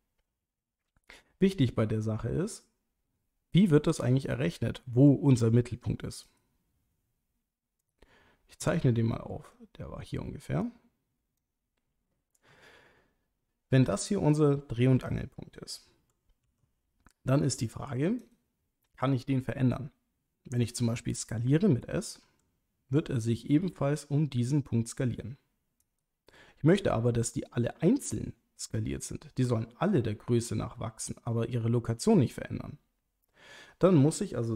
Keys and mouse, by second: 6.2 right click, 7.8 click, 9.5 click, 10.6 click, 16.4 r, 18.2 right click, 22.2 s, 25.8 right click, 30.3 s, 31.1 right click.